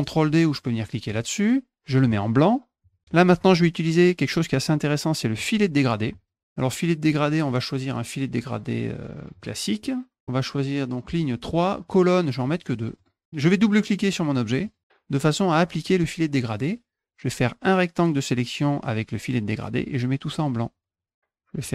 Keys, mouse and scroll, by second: 1.1 click, 2.8 click, 6.1 click, 9.3 click, 12.4 click, 12.6 click, 13.0 click, 14.6 click, 14.8 click, 17.3-18.6 drag, 20.7 click.